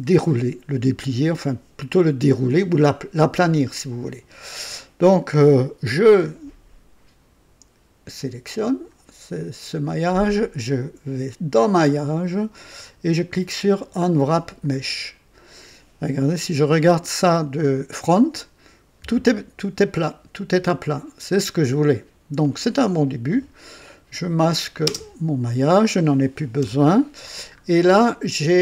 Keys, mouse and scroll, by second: 8.5 click, 11.5 click, 14.6 click, 16.4 KP_1, 20.0-22.6 drag, 24.2 click, 24.9 space, 26.6 KP_2, 27.4-27.7 scroll up 1, 28.1-28.6 right drag.